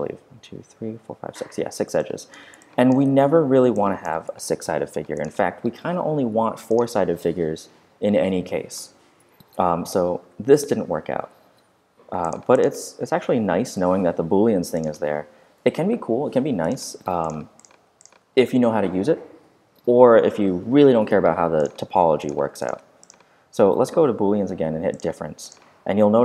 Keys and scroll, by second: 3.0 super+a, 9.8 z, 13.2 z.